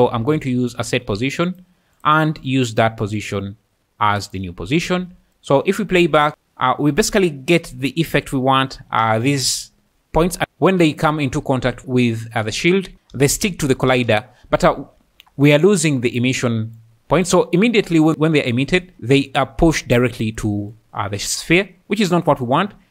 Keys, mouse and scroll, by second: 0.0-13.9 typing, 2.0 click, 2.7 click, 10.8-11.1 middle drag, 16.1 click.